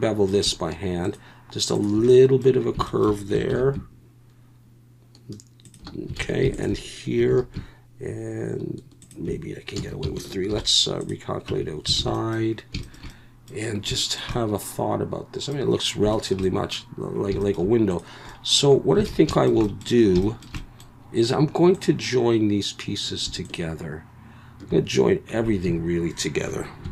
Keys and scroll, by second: 3.5 ctrl+b, 6.2 alt+a, 7.3 ctrl+b, 9.8 a, 10.5 alt+n, 11.5 Tab, 12.0 alt+a, 19.1 alt+a, 25.7 a.